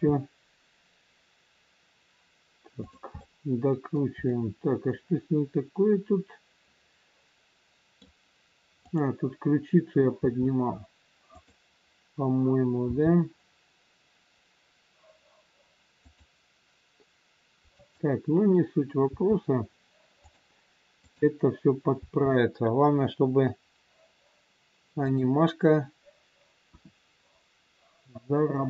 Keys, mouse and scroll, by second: 0.0 r, 3.2 middle click, 8.8 click, 10.1 r, 12.7 g, 17.7 click, 19.1 r, 21.0 click, 21.9 r, 26.6 KP_1, 27.0 scroll down 1.